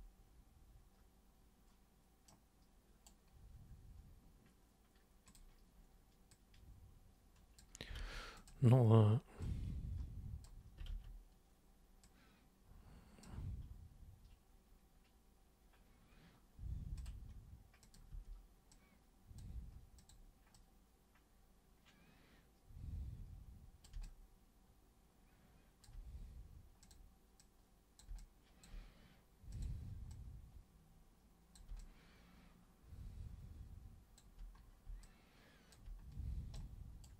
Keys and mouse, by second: 2.3 super+right click, 5.3 click, 6.3-7.6 drag, 8.0 ctrl+z, 8.4 click, 9.4-10.4 drag, 10.9 ctrl+super+z, 12.0-13.2 super+drag, 17.0 super+click, 17.8 super+click, 18.1 super+w, 18.7-19.4 super+drag, 19.9 super+click, 20.5-23.8 super+drag, 24.0-25.8 alt+super+drag, 26.8 super+click, 27.4 super+click, 28.2-28.6 alt+super+drag, 29.5 super+click, 30.1-31.5 drag, 31.8-34.2 alt+drag, 35.0 alt+click, 36.5 super+right click.